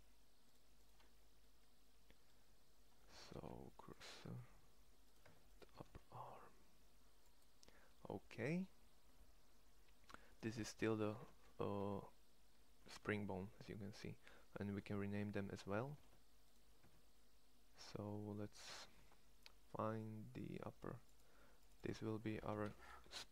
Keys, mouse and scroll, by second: 1.3 middle click, 1.6 middle click, 3.1 shift+s, 4.1 Tab, 5.0 Tab, 5.6 shift+s, 9.1-11.0 middle drag, 11.0 ctrl+Tab, 11.5 g, 14.6 Tab, 15.8 ctrl+Tab, 16.7 Tab.